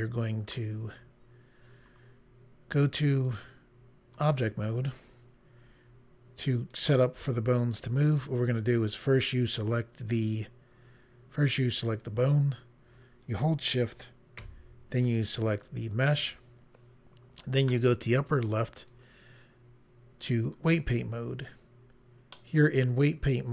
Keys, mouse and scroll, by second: 3.3 click, 4.1 click, 6.7 click, 11.8 click, 15.5 shift+click, 18.8 click, 20.5 click, 22.3 middle click.